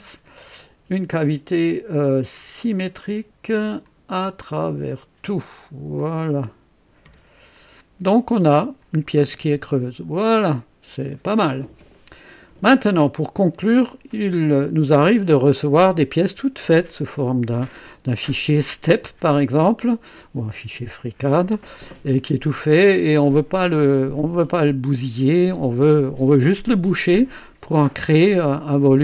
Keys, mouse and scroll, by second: 0.0-0.5 typing, 2.5 click, 3.8 click, 4.5 click, 5.7-7.0 typing, 5.9 click, 7.5-8.9 drag, 9.2-11.1 drag, 12.1-13.1 drag, 13.0 typing, 13.5 scroll up 1, 22.1-23.6 drag, 28.5 click.